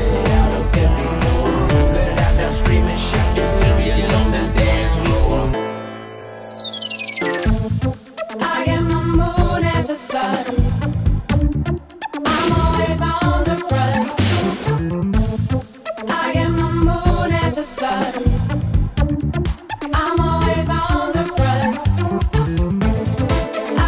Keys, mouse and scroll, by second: 1.7 click, 6.2 click, 10.1 right click, 11.5 click, 13.0 click, 14.4 click, 15.5 click, 16.5 Delete, 16.6 Delete, 16.8 Delete, 16.9 Delete, 17.1 Delete, 17.4 Delete, 17.6 Delete, 17.7 Delete, 17.9 Delete, 18.0 Delete, 18.2 Delete, 19.7 Delete, 20.1-21.7 typing, 22.7-23.1 drag.